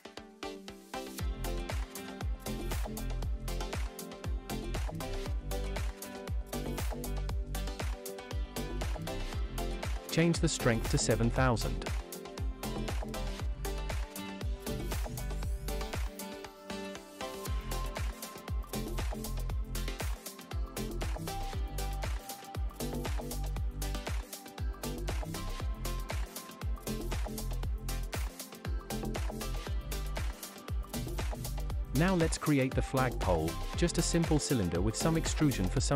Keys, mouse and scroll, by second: 0.4 click, 1.5 click, 3.9 click, 5.0 click, 5.2 click, 8.5 click, 9.6 click, 13.8 space, 17.8 space, 19.9 click, 20.6-21.3 shift+middle drag, 24.4 KP_7, 25.0-25.6 shift+middle drag, 25.6-26.0 scroll up 3, 26.2-26.6 shift+middle drag, 28.0 click, 29.5 shift+a, 33.5-33.8 scroll down 2, 34.0-34.3 shift+middle drag, 35.8 s.